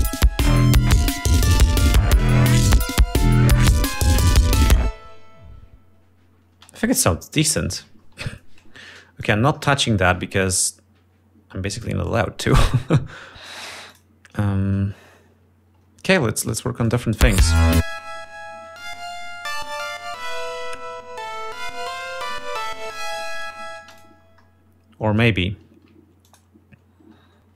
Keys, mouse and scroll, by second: 7.1 space, 8.8 ctrl+scroll down 2, 9.8 click, 12.7 click, 13.1 right click, 14.5 click, 17.5 click, 18.0 space, 18.5 click, 21.6 ctrl+scroll up 2, 22.1 ctrl+scroll down 2, 24.5 space, 24.5 click, 24.9-25.2 scroll up 2, 25.7 scroll up 2, 26.9 ctrl+click.